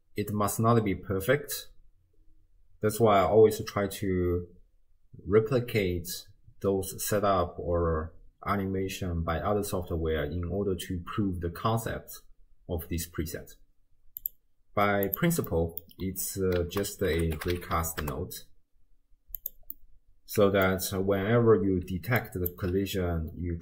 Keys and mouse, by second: 14.2 click, 15.1 click, 15.5 middle click, 16.6 ctrl+a, 19.7 middle click, 21.9 d, 22.2 click, 22.5 d, 22.6 d, 22.6 d.